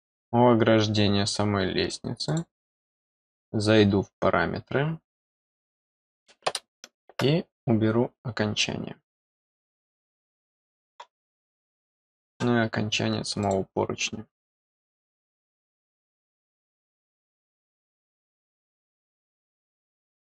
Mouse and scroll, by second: 2.2 click, 5.3 click, 9.4-9.8 scroll up 2, 10.1 middle click, 13.4 click, 16.9 click, 17.7 click, 18.5 click.